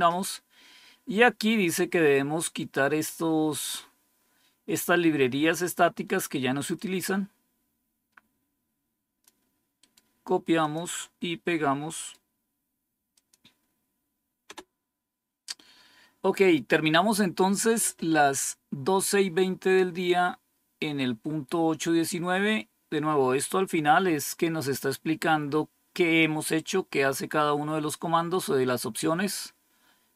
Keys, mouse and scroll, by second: 6.7-9.2 drag, 9.7 right click, 10.5 click, 11.8 right click, 13.0 click, 14.4 Return, 20.0-20.6 scroll down 5, 21.4-22.2 scroll down 6, 22.8 scroll down 3, 23.5 scroll down 2, 24.2 scroll down 2, 25.3-26.6 scroll up 2, 26.6 scroll up 1, 28.7-30.1 scroll up 2.